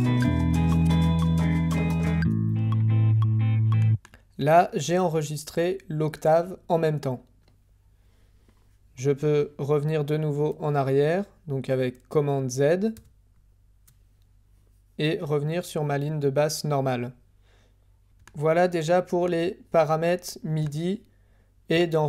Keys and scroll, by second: 0.2 d, 12.9 super+z.